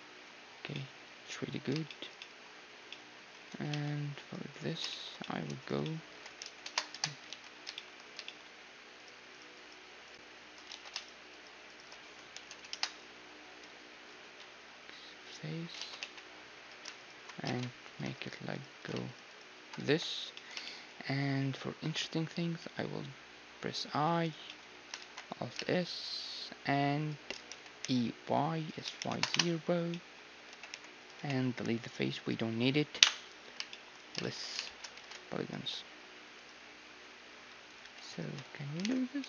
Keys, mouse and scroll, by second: 3.7 ctrl+Tab, 4.5-7.5 right drag, 6.1 s, 7.3 ctrl+z, 8.9-13.5 right drag, 10.7 ctrl+z, 12.0 s, 13.2-15.2 middle drag, 15.2 x, 15.8 ctrl+z, 16.0 x, 17.0-22.6 right drag, 17.3 middle click, 17.4 ctrl+Tab, 19.8 f, 20.4 click, 21.1-22.9 middle drag, 22.6 i, 24.4-26.4 middle drag, 25.0 alt+s, 27.5 e, 28.7 s, 29.9-31.9 middle drag, 30.5 g, 31.2 x, 33.0 KP_1, 33.7-36.4 middle drag, 35.0 ctrl+Tab, 36.4-39.2 right drag, 37.3 a, 38.8 alt+m.